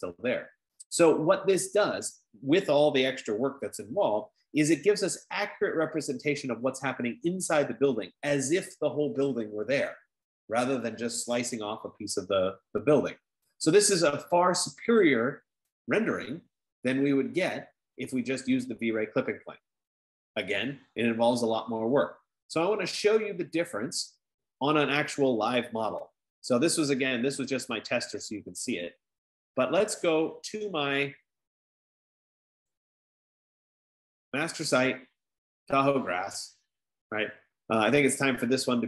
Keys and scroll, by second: 9.2 F15.